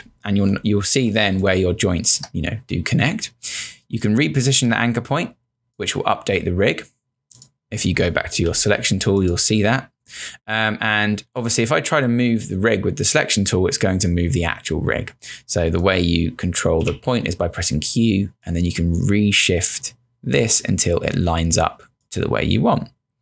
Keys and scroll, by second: 1.3 space, 8.5 v, 16.9 q.